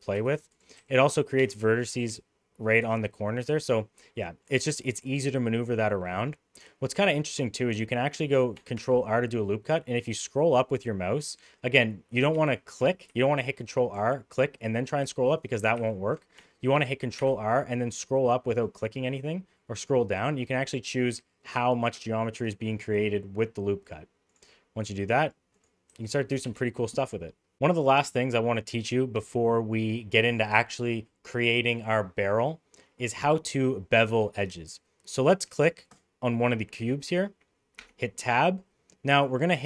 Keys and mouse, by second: 0.1 1, 0.7 g, 2.0 g, 8.7 ctrl+r, 13.0 ctrl+r, 15.7 ctrl+z, 17.2 ctrl+r, 24.7 middle click, 25.6 click, 25.9 g, 26.7 middle click, 28.7 middle click, 37.8 Tab.